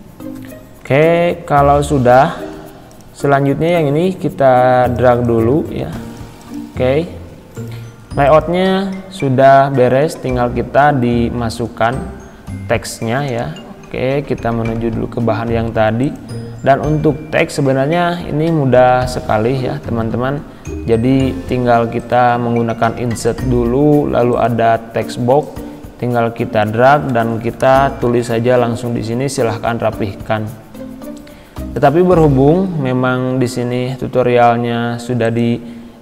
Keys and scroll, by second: 1.1 Right, 2.6 Left, 27.5-28.4 typing, 32.6 Delete.